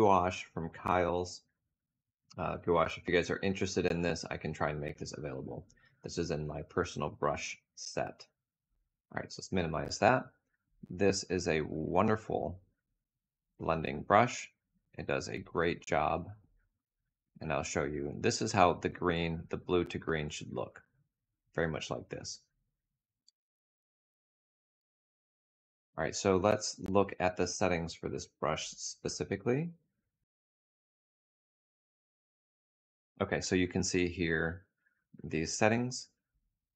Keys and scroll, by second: 22.8 F6.